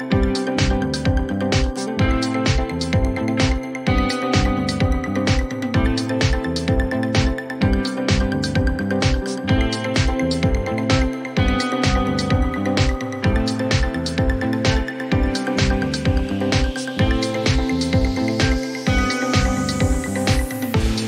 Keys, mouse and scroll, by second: 0.6 right click, 2.4 click, 4.5-5.4 typing, 7.0 Return, 9.4 Return, 9.7 click, 12.0 click, 12.9 click, 13.3-14.1 typing, 15.3 click, 15.6 click, 19.1 click, 20.3 0, 20.5 0, 20.8 0.